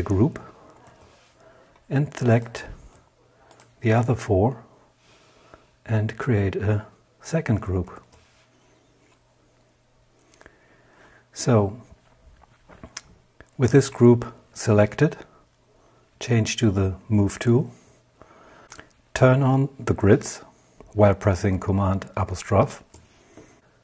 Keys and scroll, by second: 6.9 super+g, 14.5 v, 21.7 super+'.